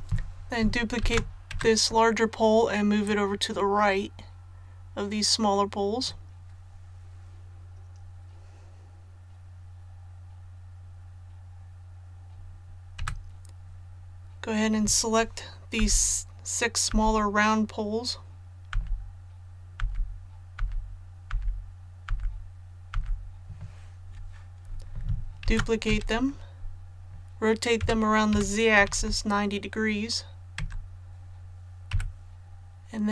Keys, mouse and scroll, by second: 1.0 shift+d, 3.0-6.9 drag, 13.0 a, 15.8 typing, 20.6-23.4 typing, 25.4 shift+d, 27.8-28.9 typing, 31.9 KP_7.